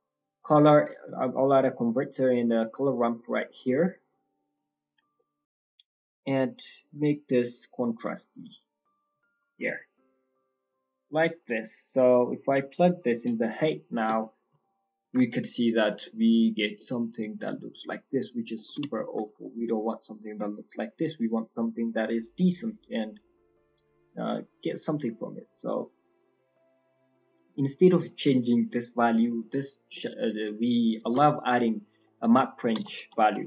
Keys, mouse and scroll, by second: 4.3 click, 5.1 middle click, 5.3-5.9 scroll up 6, 6.6 click, 8.1 click, 12.2 click, 13.4 middle click, 13.8 scroll down 7, 14.1 middle click, 15.1 ctrl+shift+click, 15.8-16.3 scroll down 2, 16.0 middle click, 16.3 scroll up 5, 16.6 scroll down 1, 16.7 middle click, 17.0-17.4 scroll up 2, 18.2 middle click, 18.5 shift+middle click, 18.9 ctrl+middle click, 19.4 middle click, 20.3-20.7 scroll up 6, 20.7 middle click, 21.1 middle click, 21.4-22.0 scroll up 1, 22.0-22.8 scroll up 4, 22.3 middle click, 23.1 click, 23.7 click, 26.8 middle click, 28.0-28.9 scroll up 3, 28.9 scroll down 1, 29.0 scroll down 4, 29.2 middle click, 29.9 middle click, 30.5 scroll down 2, 30.9 shift+a.